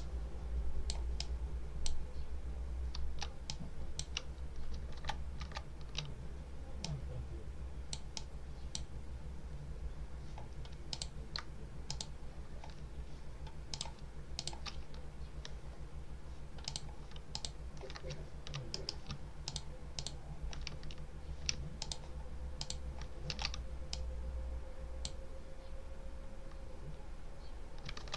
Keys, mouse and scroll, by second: 3.4-4.0 ctrl+drag, 4.8 ctrl+z, 6.7-8.0 drag, 10.8 click, 11.8 shift+click, 13.6 click, 14.2 shift+click, 15.6-16.1 scroll down 1, 16.5 click, 17.2 shift+click, 18.6 ctrl+click, 19.4 ctrl+click, 19.8 ctrl+click, 21.7 ctrl+click, 22.5 ctrl+click, 23.2 ctrl+a, 23.8 click, 27.9 ctrl+z.